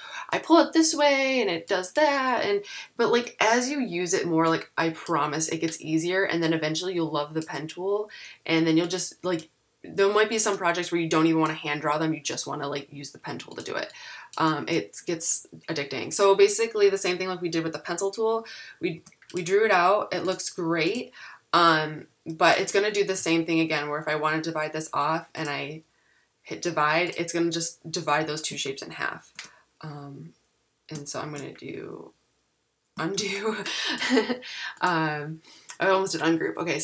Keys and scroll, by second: 19.0 v, 33.1 super+z.